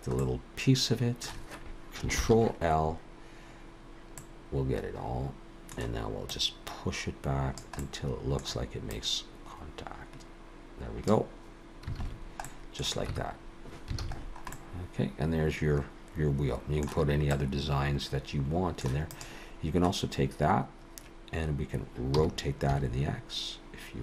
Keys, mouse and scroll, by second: 0.2 middle click, 2.2 ctrl+l, 4.2 middle click, 6.3 click, 7.8 middle click, 8.9 click, 12.1 alt+a, 12.1 scroll down 1, 12.5 middle click, 13.1 Tab, 14.0 alt+a, 14.2-14.8 scroll down 4, 14.5 middle click, 17.3 middle click, 19.1 click.